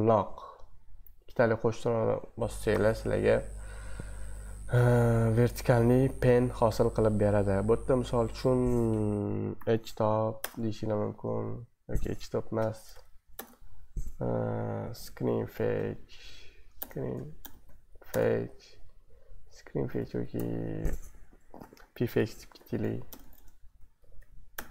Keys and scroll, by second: 9.5-10.5 typing, 12.3-15.7 typing, 16.2 Right, 16.8-18.1 typing, 19.7-24.7 typing.